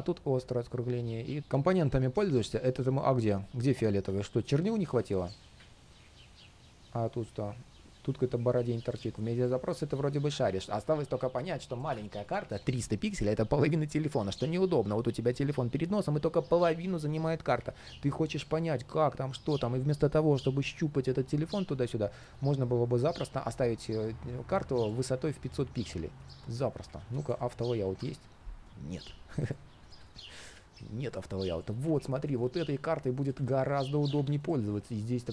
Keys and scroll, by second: 1.4 ctrl+shift+3, 5.3 ctrl+shift+3, 24.9 super+z, 33.2 super+space.